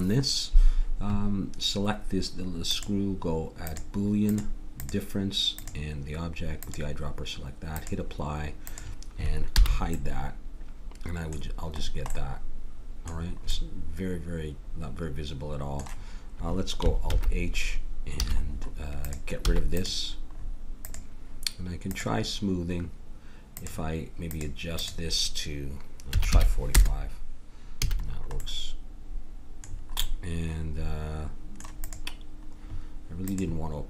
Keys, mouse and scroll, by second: 2.7-7.5 drag, 7.7-10.6 drag, 9.6 h, 17.1 alt+h, 18.2 a, 19.5 x, 23.5-27.1 drag, 27.8 a, 28.4-29.7 middle drag.